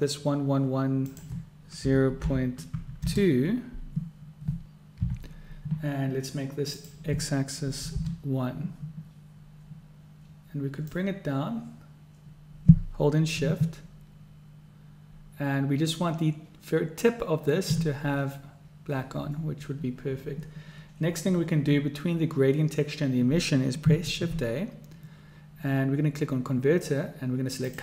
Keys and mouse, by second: 1.2-4.1 drag, 6.8-9.2 drag, 11.2-17.9 drag, 24.2 shift+a.